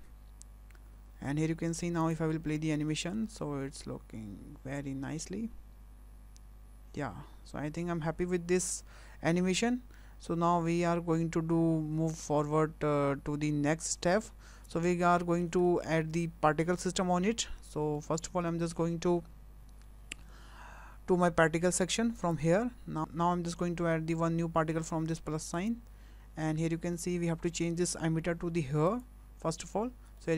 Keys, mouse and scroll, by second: 2.0 click, 2.9 middle click, 3.3 space, 14.4 space, 14.9 middle click, 15.6 shift+middle click, 17.9 shift+middle click, 18.5 shift+middle click, 22.1 click, 25.5 click, 28.9 click, 30.2 shift+middle click.